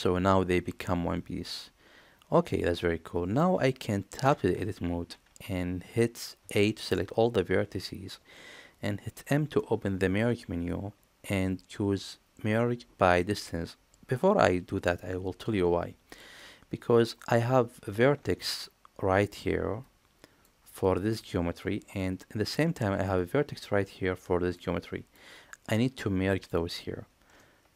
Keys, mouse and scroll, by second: 4.2 Tab, 6.4 a, 9.1 m.